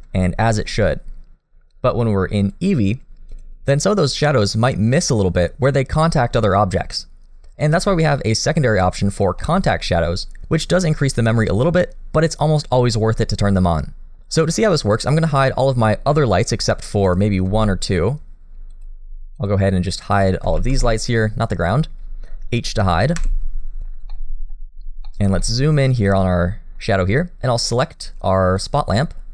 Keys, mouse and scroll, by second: 0.2 shift+middle click, 2.4 click, 8.9 scroll down 2, 9.4 shift+middle click, 15.0-15.8 scroll down 5, 15.8 middle click, 17.0 click, 18.7 shift+click, 19.3 shift+click, 20.0 click, 20.6 b, 24.1 middle click, 24.1 h, 24.7-25.3 scroll up 2, 25.1 middle click, 25.4 shift+middle click, 25.6-26.5 scroll up 1, 26.5-28.6 scroll up 1, 28.6 click.